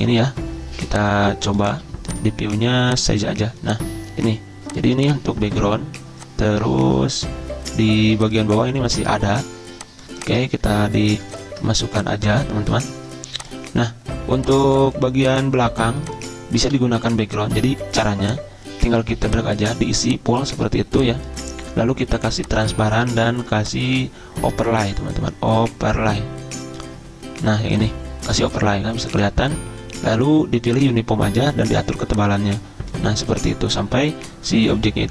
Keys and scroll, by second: 16.6 Delete.